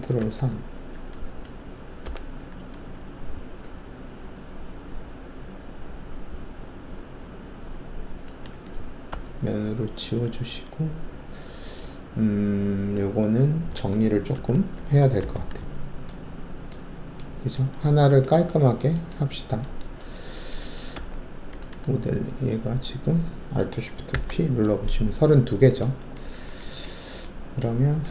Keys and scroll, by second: 0.1 ctrl+alt+3, 2.0 alt+4, 9.1 ctrl+alt+`, 14.3 alt+shift+2, 15.2 alt+f, 20.9 alt+2, 24.1 alt+shift+p.